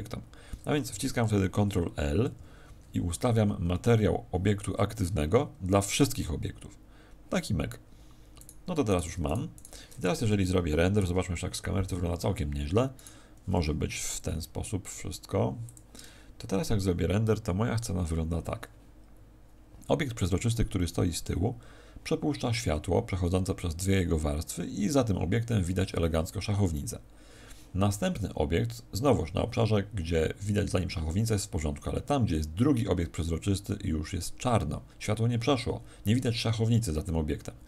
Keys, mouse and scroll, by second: 2.1 ctrl+l, 8.3 right click, 9.5 right click, 10.9 KP_0, 12.9 right click, 14.2 g, 15.7 click.